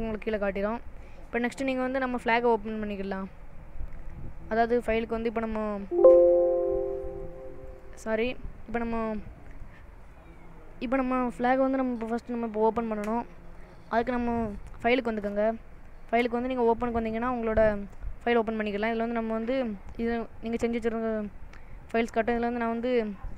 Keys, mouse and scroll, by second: 2.1 click, 15.8 click.